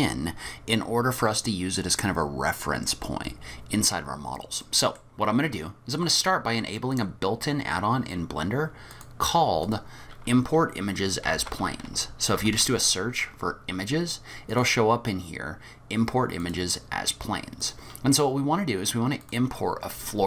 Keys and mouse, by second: 4.6 middle click, 6.3-7.1 drag.